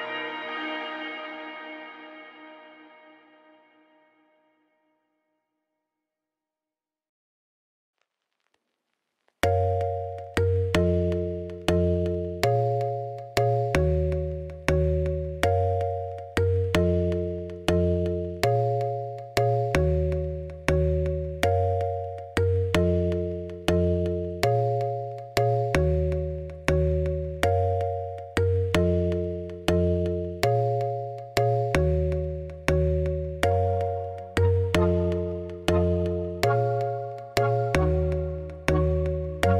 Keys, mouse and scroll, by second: 0.6-4.0 typing, 1.1 click, 3.6 click, 4.6 alt+click, 5.7 click, 6.0 l, 6.2 l, 6.6 h, 7.2 click, 7.6 l, 8.8 u, 9.6 a, 9.8 s, 10.3 g, 11.4 h, 11.4 middle click, 11.6 3, 11.9 click, 12.2 x, 12.5 middle click, 13.1 2, 13.2 click, 13.5-14.5 middle drag, 14.5 alt+click, 15.6 middle click, 15.9 a, 16.7 u, 18.3 a, 18.7 n, 20.2 click, 20.6 ctrl+z, 20.8 click, 21.6 g, 22.0 s, 23.6 a, 23.9 alt+h, 24.0 a, 24.7 click, 25.3 g, 26.2 click, 26.3 g, 26.8 s, 27.5 click, 27.6 s, 29.3 g, 29.9 Tab, 30.2 Tab, 31.0-32.3 drag, 32.3-32.8 scroll down 8, 32.8 r, 33.2 g, 34.3 scroll up 1, 34.4 Tab, 35.0 middle click, 35.1 scroll down 3, 35.6 Tab, 35.8 click, 36.1 l, 37.4 u.